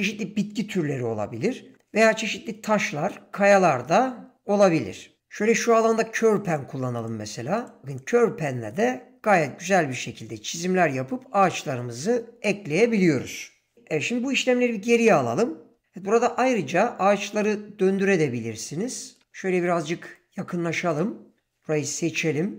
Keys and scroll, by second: 21.4 ,.